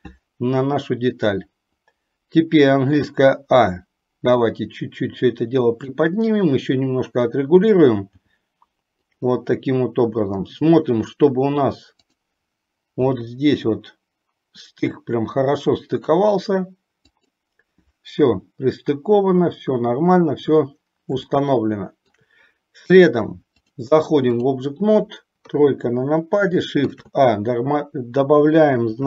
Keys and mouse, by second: 3.2 a, 4.7-6.0 drag, 7.3 click, 8.3 g, 13.2 g, 21.4 shift+middle click, 23.7-24.8 drag, 25.6 KP_3, 26.9 shift+a.